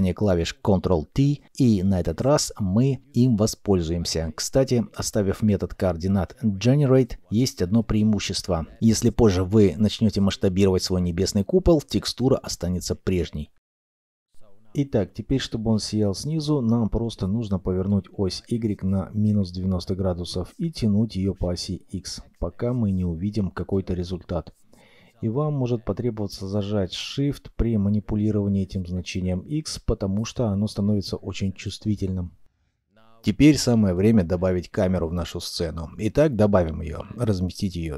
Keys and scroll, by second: 1.2 ctrl+t, 9.2 s, 12.7 Escape, 17.9 -, 18.1 9, 18.2 0, 18.6 Return, 34.8 shift+a.